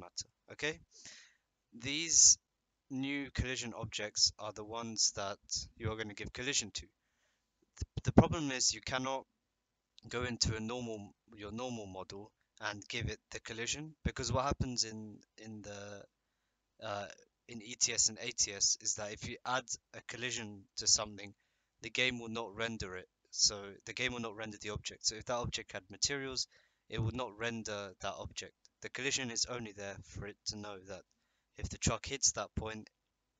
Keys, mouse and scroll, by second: 10.0 click.